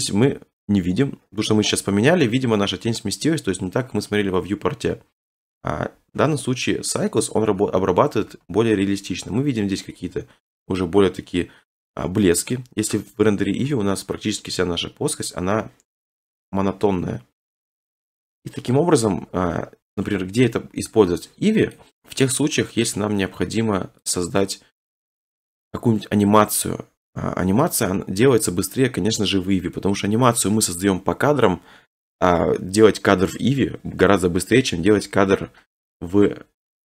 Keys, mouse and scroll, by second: 0.8-1.8 scroll, 2.0 click, 6.1 Right, 7.2 Left, 7.7 Right, 8.3 Left, 12.8 Left, 14.3 middle click, 14.8 middle click, 14.9-15.5 scroll, 15.7 right click, 21.9 click, 24.1 click, 27.7 click, 27.9 scroll, 28.2 middle click, 29.7 middle click, 36.5 click.